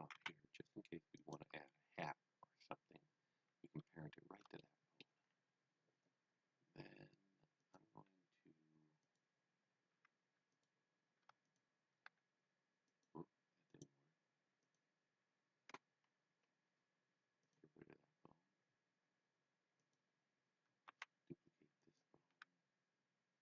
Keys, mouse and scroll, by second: 0.0-0.6 typing, 1.2 click, 3.3-4.4 scroll down 1, 4.5 shift+middle click, 5.2 scroll up 1, 7.5 scroll up 1, 7.6 click, 10.0 e, 10.5 click, 11.4 shift+click, 12.1 g, 13.0 right click, 13.6 click, 16.3 Delete, 17.4 click, 21.8 click, 22.3 r.